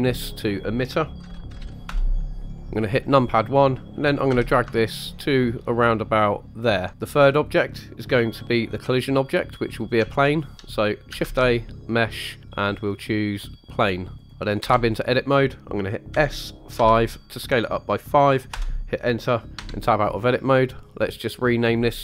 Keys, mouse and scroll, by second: 0.0-1.9 drag, 1.5 t, 2.6 KP_1, 4.3 g, 6.6 ctrl+click, 6.9 middle click, 6.9 KP_1, 9.7 middle click, 10.1-10.5 shift+middle drag, 11.2 shift+a, 14.6 Tab, 16.1 s, 16.7 5, 18.5 Return, 19.6 Tab, 21.6 click, 21.7-22.0 drag.